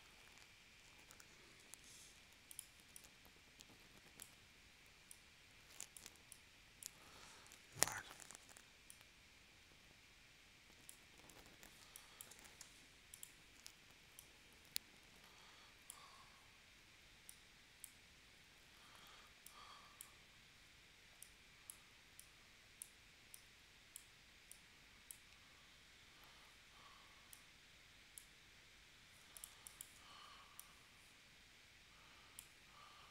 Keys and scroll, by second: 1.6 r, 7.7 shift+w, 11.8 space, 12.6 v, 29.5 space.